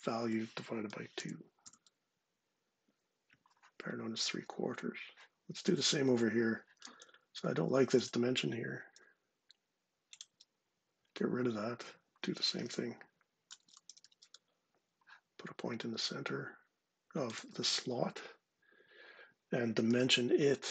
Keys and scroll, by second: 0.3-1.3 typing, 6.7 Escape, 9.9 Delete, 12.2-14.1 typing, 19.5 d.